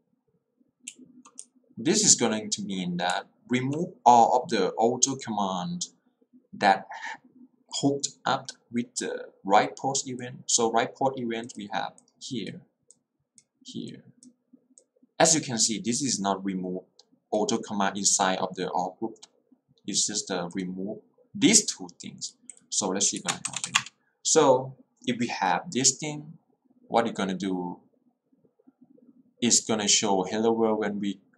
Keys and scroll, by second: 0.9 h, 1.5 l, 3.1 h, 23.7 shift+w, 23.9 Return.